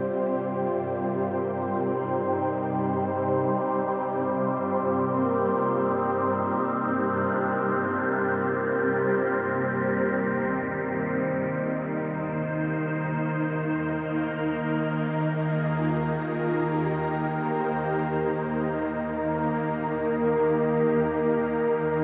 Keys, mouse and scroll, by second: 4.6 middle click, 5.2-5.8 shift+middle drag, 6.0 click, 7.2 click, 8.8 click, 9.4 click, 9.8-14.7 drag, 16.2 click, 17.0-17.3 drag, 21.2 click.